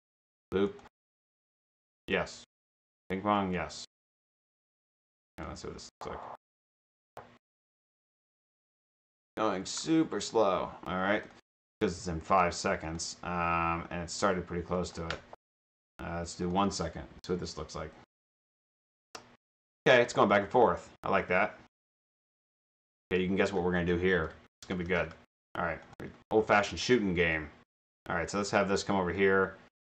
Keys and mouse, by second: 0.7 click, 1.5 click, 2.9 click, 3.4 click, 4.2 click, 4.7 click, 5.4 click, 10.3 click, 11.4-12.0 drag, 12.8 click, 14.8 click, 16.4 click, 22.2 click, 22.4-25.5 typing, 25.4 click, 25.8 click, 28.6 click.